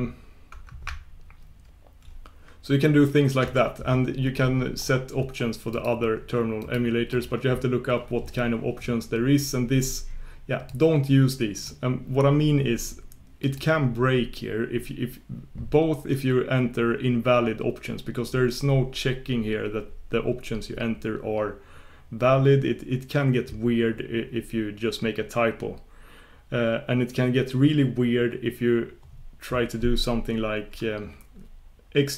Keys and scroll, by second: 3.4 shift+super+q.